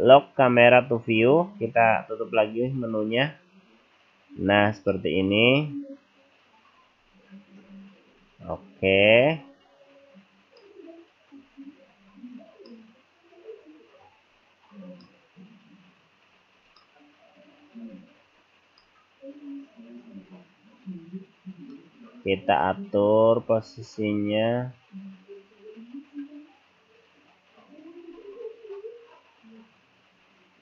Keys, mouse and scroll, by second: 0.5 click, 2.7 n, 3.7-4.1 scroll down 4, 4.1-4.9 scroll up 3, 4.9 middle click, 6.2-6.6 scroll down 2, 6.6 scroll up 3, 7.0-8.0 scroll down 6, 8.0-9.0 scroll up 5, 9.0 scroll up 1, 9.5 scroll down 2, 10.1-10.6 scroll up 2, 10.6 middle click, 11.5 scroll down 2, 12.0-12.4 scroll up 2, 12.7 middle click, 14.3 scroll down 2, 16.8 middle click, 17.9-18.9 scroll up 2, 18.9 middle click, 20.4-21.1 scroll up 1, 21.1-21.7 scroll down 2, 21.8 middle click, 23.6-24.0 scroll down 1, 24.1-24.7 scroll up 2, 24.9-25.7 scroll down 2, 25.7 scroll up 1, 28.2 click.